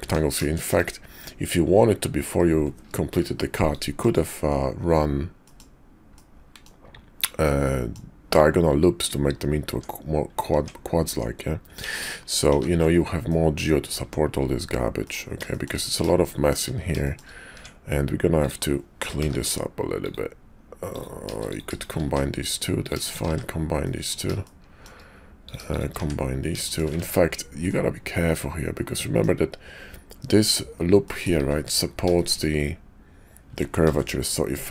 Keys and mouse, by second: 0.0 Tab, 0.5 shift+click, 3.0 ctrl+r, 5.4 click, 6.1 click, 7.4 click, 9.7 Tab, 10.5 Tab, 11.1 Tab, 11.8 ctrl+z, 12.0 ctrl+z, 12.7 ctrl+z, 13.1 click, 14.0 Tab, 15.0 click, 15.5 shift+click, 16.2 shift+click, 17.0 shift+click, 17.5 Tab, 18.3 click, 19.2 g, 20.8 click, 22.0 1, 22.7 click, 23.3 1, 23.7 click, 24.4 shift+click, 25.3 click, 25.9 1, 27.0 ctrl+z, 27.6-29.2 middle drag, 31.0 middle click, 32.2 shift+click, 33.7 ctrl+r.